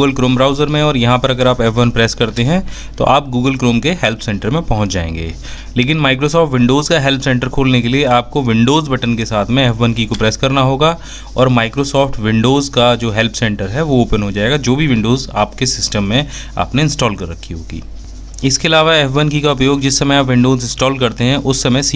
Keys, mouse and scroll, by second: 18.4 f, 18.8 F1.